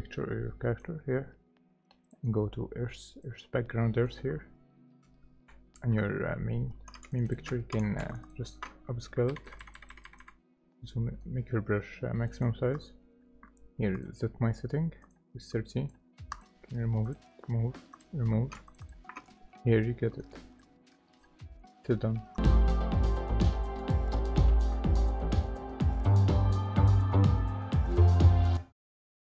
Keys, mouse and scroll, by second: 2.2 right click, 7.0 space, 7.1 ctrl+click, 7.3 ctrl+double click, 7.9 space, 8.1 ctrl+alt+click, 8.1 ctrl+alt+click, 8.7 double click, 9.3-11.1 typing, 9.6-12.7 drag, 11.1 right click, 14.0-17.2 drag, 18.5 space, 18.6 click, 18.7 ctrl+click, 18.9 ctrl+double click.